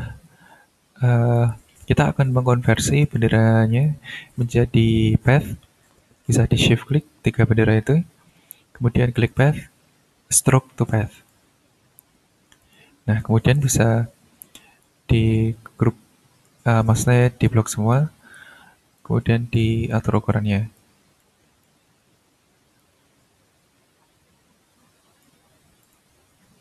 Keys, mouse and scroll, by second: 1.6 ctrl+scroll up 2, 2.7 click, 3.7 shift+click, 6.9 shift+click, 9.1 click, 11.1 click, 12.6 click, 13.2-15.0 drag, 15.2-16.0 ctrl+scroll down 2, 16.0-17.2 ctrl+scroll down 3, 17.4 click, 18.9-19.7 ctrl+drag, 19.9-20.9 ctrl+drag, 21.2-21.8 drag, 22.8-25.4 drag, 25.5 ctrl+scroll down 2, 25.8 ctrl+click, 26.5 ctrl+scroll up 1.